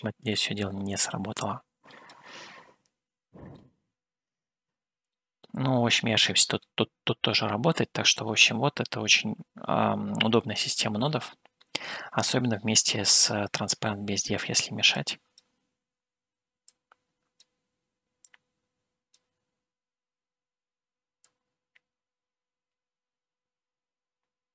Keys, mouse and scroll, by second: 3.7-5.1 middle drag, 5.7-6.9 middle drag, 8.3-8.8 scroll down 1, 10.1-12.0 scroll up 2, 12.0 middle click, 15.2 click, 17.1 click, 18.4-19.5 drag, 21.4-24.5 drag.